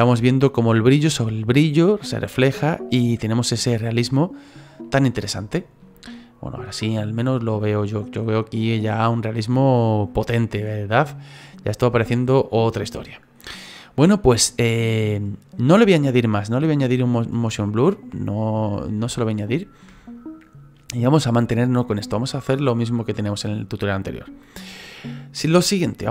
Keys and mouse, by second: 2.9 middle click, 4.8 middle click, 5.3 shift+middle click, 6.0 middle click, 10.9 middle click, 12.3 middle click, 13.4 middle click, 18.1 middle click, 19.0 shift+middle click.